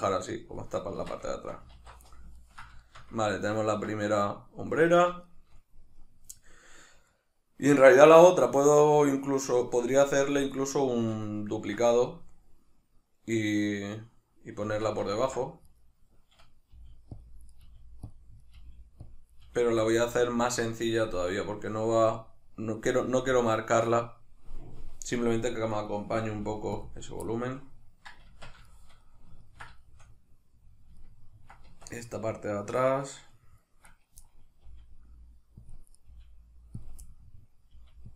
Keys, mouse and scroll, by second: 0.9 Tab, 1.3 shift+middle click, 1.7 alt+q, 2.4 ctrl+middle click, 5.3 middle click, 10.6-11.3 right drag, 11.3-15.7 ctrl+middle drag, 14.7 Tab, 15.7 right click, 16.8 g, 17.2 click, 17.5 right click, 17.6 g, 18.2 click, 18.4 right click, 18.6 g, 19.1 click, 19.3 right click, 19.4 g, 20.0 click, 25.7 right click, 26.3 g, 26.9 click, 27.3-30.9 middle drag, 28.3 Tab, 31.7 Tab, 31.8 middle click, 33.9 right click, 34.2 middle click, 34.7 g, 35.7 click, 35.9 right click, 36.1 g, 36.9 click, 37.0 middle click, 37.7 g.